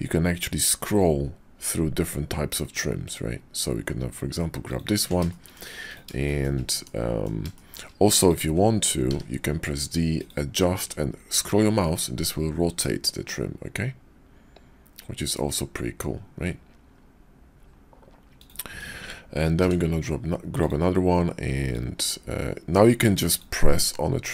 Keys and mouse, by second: 5.2 middle click, 6.3 shift+middle click, 6.9 middle click, 7.6 shift+click, 8.1 click, 9.0 d, 18.7 click, 19.5 d.